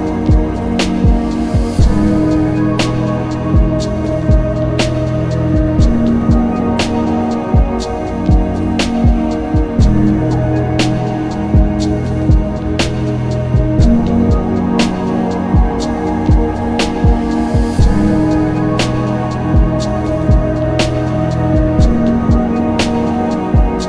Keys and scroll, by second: 3.5 z, 4.2 z, 13.3 alt+z, 13.6 alt+z, 14.3 ctrl+z, 22.9 ctrl+alt+z.